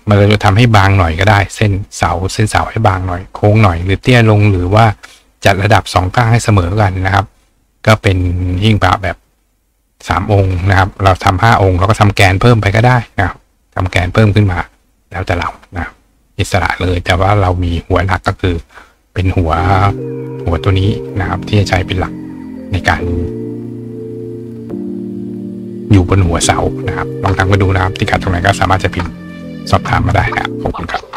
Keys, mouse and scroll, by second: 19.8-21.0 drag, 21.6 right click, 31.1 click.